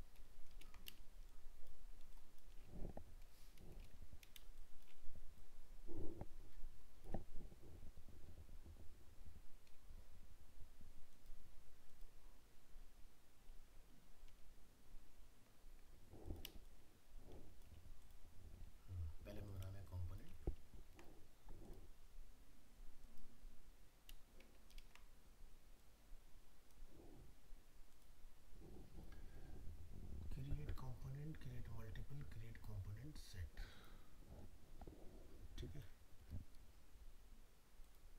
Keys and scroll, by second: 0.5 ctrl++, 14.2 ctrl+z, 20.8 ctrl+-, 24.8 ctrl++.